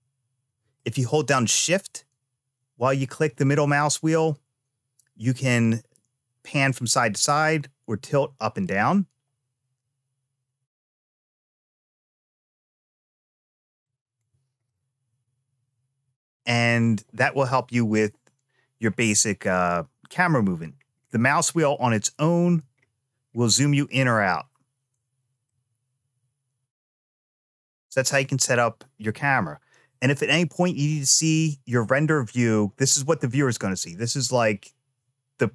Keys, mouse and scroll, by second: 0.7-1.1 shift+scroll down 1, 1.3-6.8 shift+middle drag, 7.2-8.4 shift+middle drag, 11.0 alt+middle click, 12.9 alt+click, 13.6 alt+right click, 14.4-16.5 middle drag, 20.5-21.2 scroll up 5, 21.2-22.0 scroll down 5, 22.0-22.5 scroll up 2, 23.1 scroll down 1, 23.4-24.7 scroll down 1, 24.7 scroll down 1, 25.2-27.3 shift+middle drag.